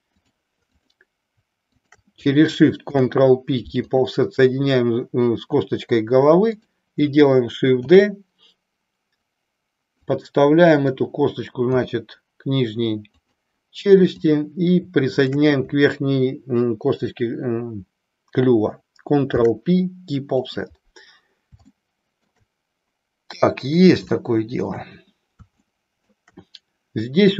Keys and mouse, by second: 0.3 click, 0.7 click, 1.8 shift+click, 2.9 ctrl+p, 7.9 shift+d, 10.9 click, 11.5 g, 13.3 click, 14.2 click, 15.2 shift+click, 19.3 ctrl+p, 21.8 shift+middle click, 24.2 shift+middle click, 25.5 shift+middle click.